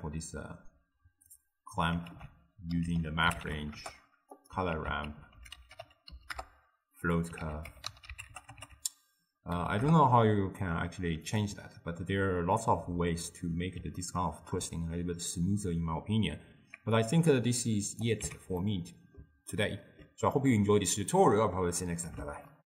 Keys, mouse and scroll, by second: 2.1 ctrl+a, 4.8 ctrl+a, 7.5 ctrl+a, 14.0-17.0 ctrl+middle drag, 17.0-18.3 drag, 18.3 x, 18.6-22.6 middle drag.